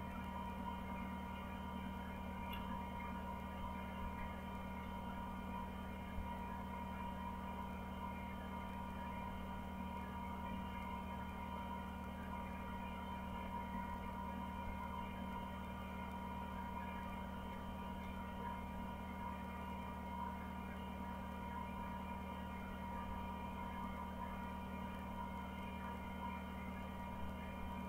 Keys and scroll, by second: 4.7 Down, 4.8 Down, 4.8 Down, 5.1 Down, 5.4 Down, 5.9 Down, 13.8 Down, 14.4 Down, 16.3 Down, 16.9 Down, 17.3 Down, 17.5 Down, 17.8 Down, 18.1 Down, 18.3 Down, 18.5 Down, 23.4 Down, 23.7 Down, 24.1 Down.